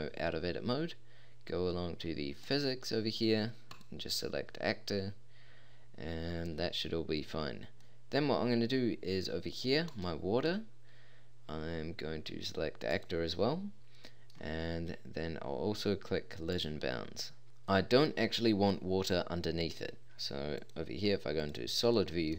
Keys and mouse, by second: 3.6-5.6 drag, 7.8-9.9 middle drag, 9.9 right click, 10.6-11.8 drag, 12.9-14.8 middle drag, 16.5-17.4 middle drag, 17.7-19.9 middle drag, 20.6-21.1 drag.